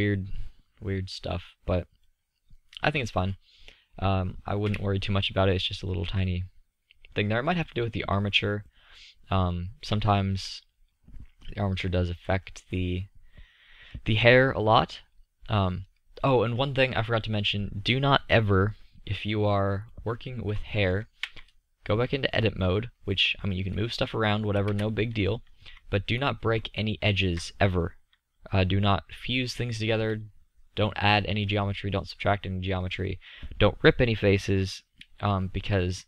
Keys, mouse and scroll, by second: 2.3 middle click, 3.0-4.3 middle drag, 4.3 KP_5, 21.1 Tab, 21.9 middle click, 23.4 g, 34.7 Escape.